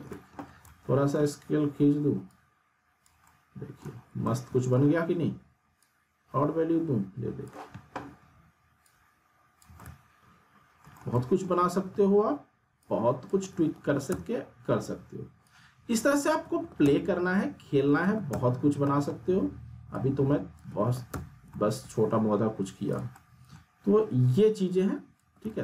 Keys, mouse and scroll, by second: 0.4 r, 0.6-2.3 middle drag, 2.3-3.2 click, 3.3-3.8 alt+middle click, 4.2-4.8 alt+middle drag, 5.8-7.7 drag, 7.9 r, 8.8-9.8 click, 9.7 w, 9.8 middle click, 11.9 r, 12.8-13.4 click, 13.3 w, 14.1 z, 14.3 scroll down 1, 15.4-16.4 click, 16.4 alt+w, 16.8 z, 17.2 scroll down 2, 17.4-18.0 alt+middle click, 17.9 alt+w, 18.3 z, 18.6 scroll down 1, 18.8 middle click, 19.9-20.9 click, 20.7 alt+w, 21.1 z, 21.3 scroll down 2, 21.6-22.1 alt+middle drag, 22.4-22.9 scroll up 1, 22.9 click, 23.1-23.8 middle click, 23.9 r, 24.7-25.3 click, 25.2 w.